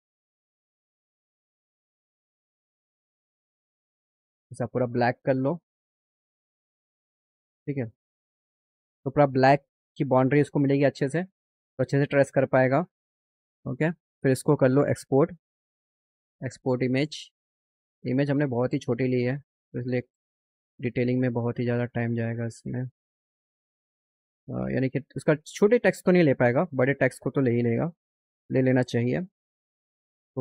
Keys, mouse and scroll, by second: 1.0 click, 2.5 click, 3.3 scroll down 2, 4.9 click, 5.9-7.8 drag, 13.3 click, 14.2 click, 14.7 click, 16.6 click, 17.7 click, 18.9 click, 21.8 click, 25.7 click, 25.8 click, 26.7 click, 29.7 click.